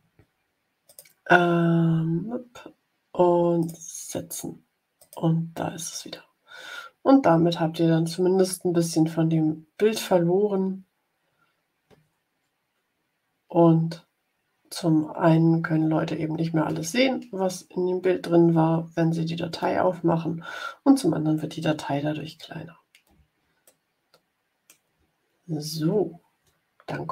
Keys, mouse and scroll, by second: 0.8 click, 3.5 click, 4.9 click, 23.6-24.8 middle drag, 25.1 ctrl+scroll down 2.